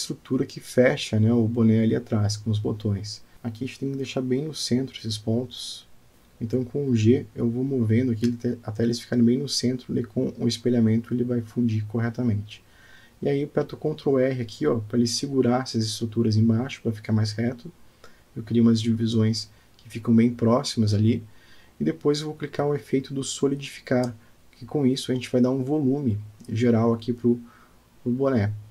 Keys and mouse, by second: 0.8 shift+middle click, 2.8 click, 3.7 middle click, 4.3 click, 4.9 middle click, 5.9 d, 6.1 middle click, 7.3 g, 9.4 Tab, 10.8 g, 13.1 Tab, 14.5 ctrl+r, 22.4 ctrl+r, 25.6 Tab, 26.4-28.7 middle drag.